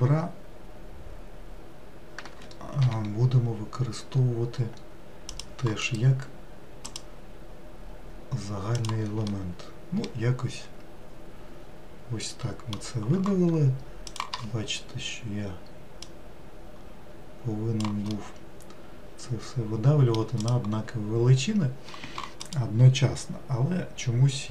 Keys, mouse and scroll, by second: 5.9-8.9 right drag, 9.4-12.5 middle drag, 14.1-16.6 drag, 18.2-20.5 middle drag, 20.5 click.